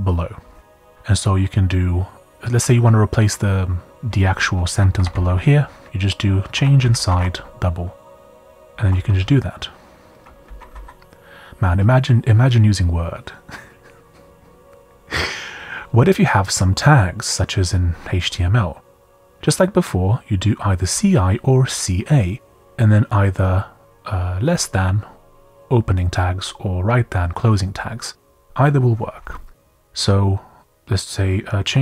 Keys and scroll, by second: 4.7 Down, 5.0 Down, 5.4 Up, 6.3-9.4 typing, 10.4-11.2 typing, 12.3-13.1 typing, 20.3-21.4 typing, 25.4-26.2 typing, 29.5-30.3 typing, 31.7-31.8 typing.